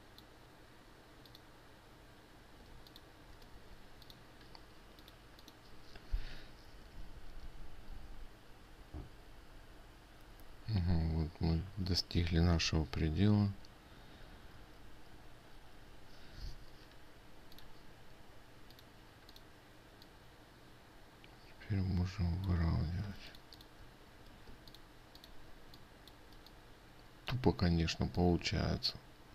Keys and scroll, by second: 23.8 ctrl+alt+space.